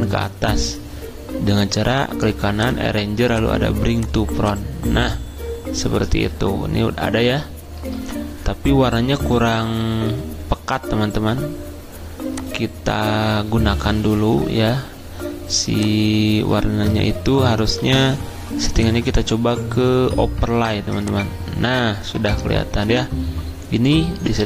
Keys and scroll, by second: 17.8 ctrl+z.